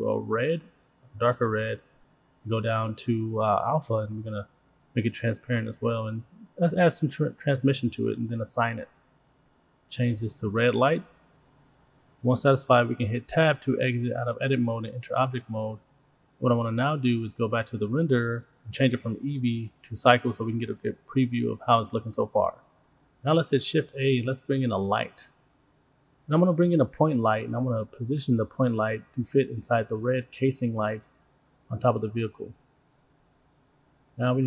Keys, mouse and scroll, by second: 2.1-2.9 scroll down 4, 3.0-4.0 drag, 4.3-4.8 scroll up 6, 4.8-5.7 scroll down 6, 5.7-6.6 drag, 6.9-7.5 scroll up 2, 7.5 scroll up 2, 7.8 click, 8.7 click, 9.0-13.5 drag, 16.5 click, 17.3 scroll down 3, 17.5 middle click, 17.5-18.0 scroll up 2, 18.0 click, 19.3-20.6 drag, 21.5 click, 21.6 middle click, 21.6-22.2 scroll down 3, 22.7 shift+a, 30.2-30.7 drag, 31.0 click, 31.4 click, 31.7-32.2 scroll up 4, 32.0 middle drag, 32.4 click, 32.8 middle click, 33.2-34.4 drag.